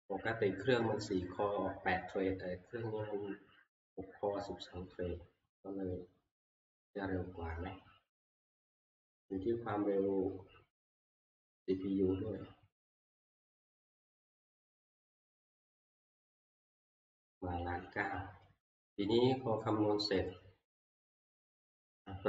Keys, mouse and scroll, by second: 21.3 click.